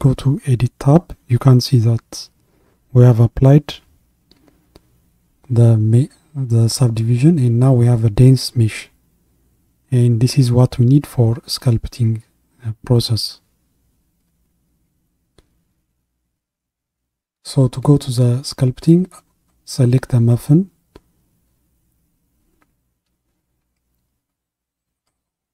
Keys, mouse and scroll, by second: 1.0 a, 3.4-4.3 scroll up 5, 5.3-5.7 scroll down 2, 11.1-14.2 middle drag, 14.2 Tab, 15.3-15.7 scroll down 1, 15.7-19.1 middle drag, 19.1 click, 19.8 click, 24.9 click.